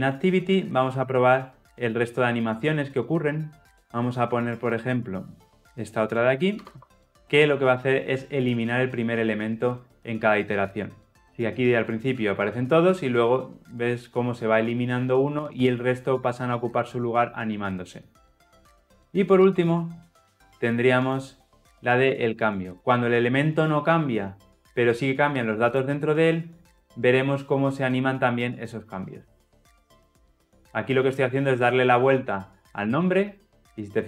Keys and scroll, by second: 8.6 shift+F10, 19.4 ctrl+z, 25.7 shift+F10.